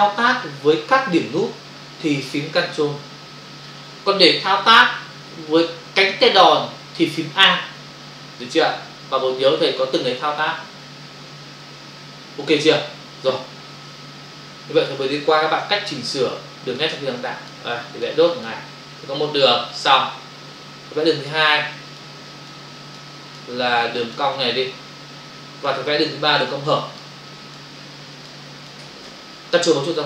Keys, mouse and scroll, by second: 14.4 ctrl+-, 16.1 space, 17.2 click, 17.9 click, 18.0 click, 18.2 click, 18.5 double click, 19.3 click, 21.1 click, 21.7 click, 22.4 click, 22.5 click, 22.7 click, 23.2 click, 23.4 click, 24.0 click, 24.2 double click, 25.2 click, 26.2 click, 26.6 click, 27.3 click, 27.8 click, 28.4 click.